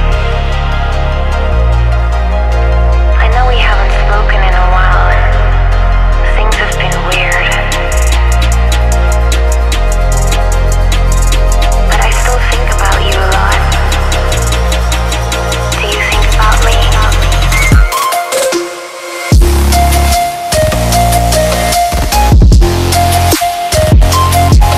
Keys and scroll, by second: 1.3 space, 1.9 alt+Right, 6.0 space, 10.3 alt+Tab, 11.9 ctrl+c, 12.8 Tab, 13.5 ctrl+v, 18.9 Tab, 19.2 Tab, 21.3 ctrl+c, 22.4 ctrl+v, 23.0 3, 23.1 2, 23.3 5, 23.4 Return.